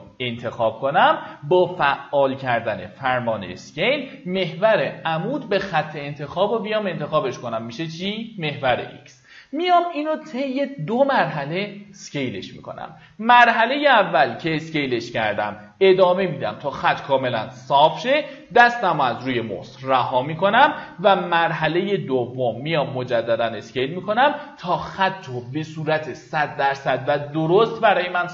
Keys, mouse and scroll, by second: 3.1 r, 13.3-25.0 drag.